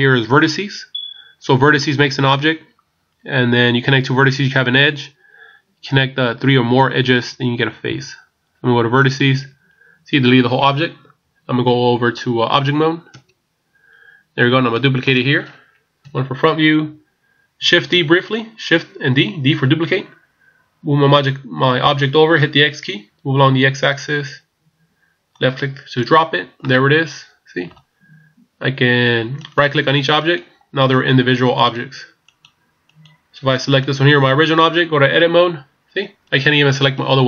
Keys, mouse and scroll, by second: 13.2 Tab, 14.8 middle click, 16.1 KP_1, 18.0 shift+d, 26.6 middle click, 29.4 right click, 30.3 right click, 35.2 Tab, 36.2 right click, 37.0 right click.